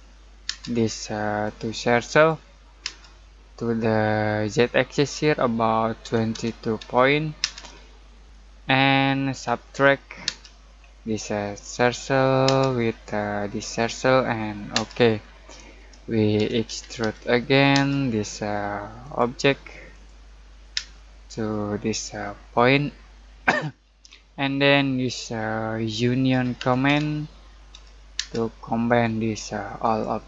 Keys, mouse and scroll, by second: 0.0-0.4 typing, 1.4 click, 2.8 space, 6.0-6.3 typing, 7.4 space, 9.0-10.2 typing, 10.7-11.7 scroll up 1, 11.7 click, 12.4 space, 13.6 click, 14.7 space, 15.2-15.6 scroll down 1, 15.6 middle click, 16.1-17.7 typing, 19.0 click, 20.7 space, 22.5 click, 23.7-24.0 scroll down 1, 24.0-26.3 middle drag, 26.0-28.1 typing, 28.8 click.